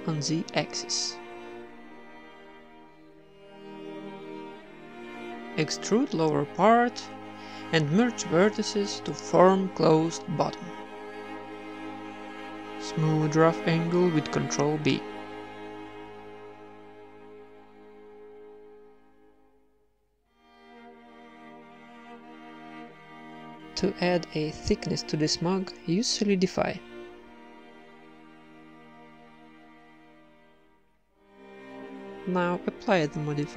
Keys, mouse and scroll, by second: 0.1 s, 6.4 alt+m, 7.2 t, 7.7 alt+m, 9.0 g, 10.6-11.8 drag, 11.8-13.0 typing, 12.8 ctrl+n, 13.3-14.4 right drag, 13.8 ctrl+b, 15.9 ctrl+Tab, 16.2 a, 16.3 c, 16.8 w, 17.5 Tab, 17.8 Tab, 17.9 a, 18.2 right click, 18.4 g, 18.9 Tab, 19.2 z, 19.6 ctrl+1, 20.4 Tab, 20.8 KP_1, 21.3 ctrl+r, 24.2 Tab, 25.8-27.2 drag, 27.2 middle click, 28.1-29.8 drag, 30.0 Tab, 30.7 ctrl+r, 31.4 Tab, 32.7 Tab, 33.4 z.